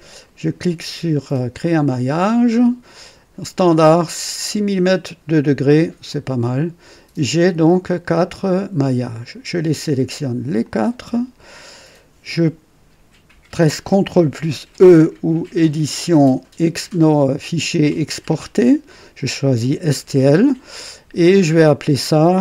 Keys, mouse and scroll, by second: 1.6 click, 6.0 click, 7.3 scroll down 2, 8.4 click, 10.6 shift+click, 15.8 click, 18.3 click.